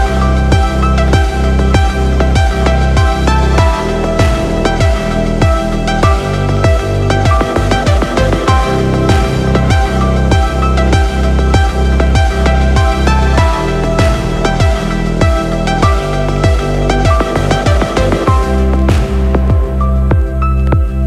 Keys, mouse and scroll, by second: 1.6 s, 2.6 click, 3.6 click, 7.0-7.7 middle drag, 8.6 click, 9.5-10.1 scroll up 1, 11.8 click, 13.1 click, 13.3-19.0 drag.